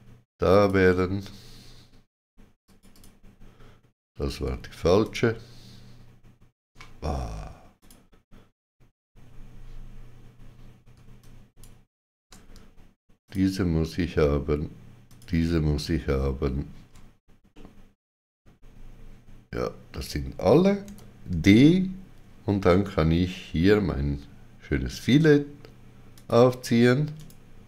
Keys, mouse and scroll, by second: 2.9 shift+click, 5.0 shift+click, 7.8 shift+click, 10.9 shift+click, 11.2 ctrl+click, 13.2 shift+click, 15.1 shift+click, 17.5 middle click, 20.8 d, 26.1 shift+click, 27.1 right click.